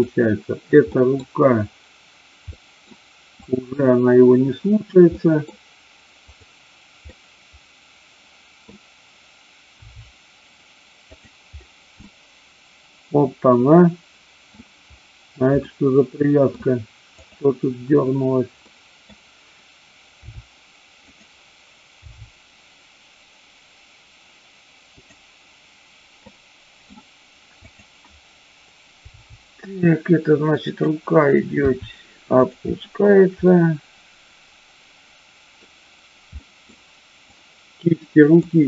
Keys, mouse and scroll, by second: 0.9 middle click, 2.5 middle click, 3.4-4.4 drag, 5.2 middle click, 6.3-7.3 drag, 7.3-8.6 middle drag, 9.8 g, 11.0 click, 12.0-14.5 middle drag, 12.0-12.5 scroll up 1, 15.6-16.5 middle drag, 17.2 click, 18.6-19.0 middle drag, 20.2 r, 22.0 g, 24.9 click, 26.2-26.8 middle drag, 29.0 g, 30.6 click, 31.6 r, 33.4-35.5 middle drag, 36.4 middle drag, 37.3-38.5 drag.